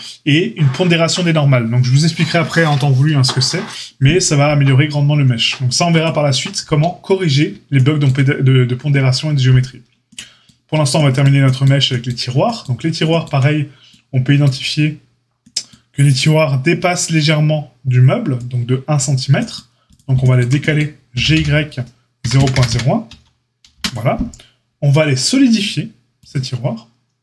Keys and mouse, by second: 19.8 click, 19.9-26.1 shift+middle drag, 21.1 g, 26.1-27.2 drag.